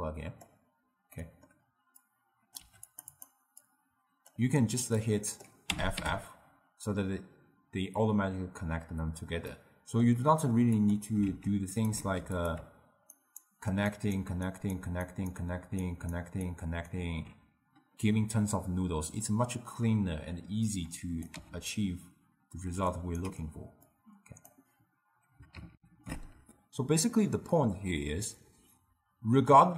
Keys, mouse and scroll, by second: 1.3 middle click, 2.1-2.7 drag, 2.7 g, 3.2 drag, 3.7 click, 3.9-5.8 drag, 5.8 f, 6.0 f, 9.6-10.9 middle drag, 10.9 click, 11.3 shift+d, 12.1 shift+d, 13.2-19.6 alt+right drag, 20.8-21.4 drag, 21.4 x, 22.9 ctrl+right click, 24.0 click, 25.8 ctrl+alt+shift+q.